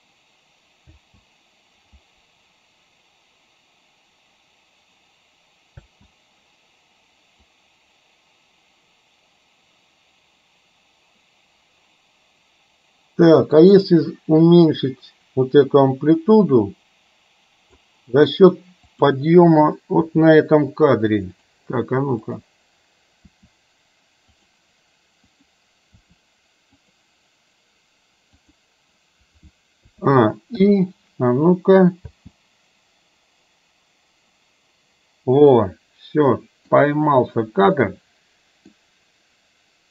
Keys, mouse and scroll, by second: 0.9 space, 5.9 space, 7.6-17.9 drag, 19.1 click, 20.1 r, 22.4 click, 23.4 r, 25.5 click, 26.0 r, 29.9 a, 30.6 i, 32.1 space, 35.5-36.8 middle drag, 37.9-38.8 middle drag.